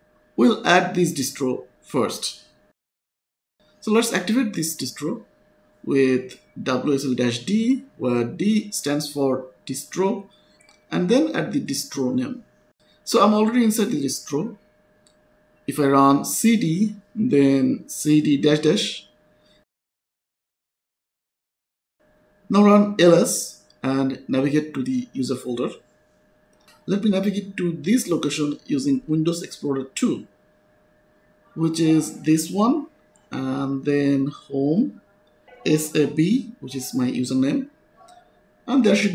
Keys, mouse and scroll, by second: 0.8 click, 3.0 click, 4.8 click, 5.9-8.1 typing, 10.4-12.5 typing, 15.0 click, 15.8-17.0 typing, 18.1-19.1 typing, 21.5 click, 22.5-24.8 typing, 25.1 Tab, 26.2 Return, 28.2 click, 32.8 click, 35.3 click.